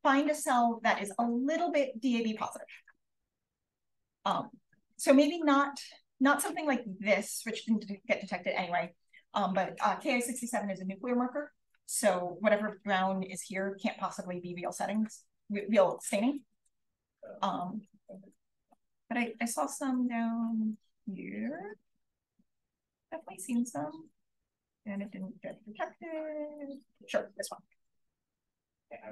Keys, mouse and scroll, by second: 1.2-1.6 scroll down 1, 1.9-5.6 drag, 5.6 Up, 5.8-7.7 scroll up 1, 14.5 click, 14.6-15.1 scroll up 1, 15.1-16.3 scroll down 1, 15.6-17.6 drag, 16.3-18.6 scroll down 1, 17.6 right click, 18.1 click, 18.6-19.5 scroll down 1, 19.0 right click, 19.5-21.5 scroll up 1, 19.9 click, 20.9 click, 21.5-22.5 scroll up 1, 21.9 click, 22.5-24.1 scroll up 1, 24.1-24.9 scroll up 1, 24.9-26.4 scroll up 1, 25.1-26.7 drag, 26.4-28.8 scroll up 1, 28.8-29.1 scroll up 1.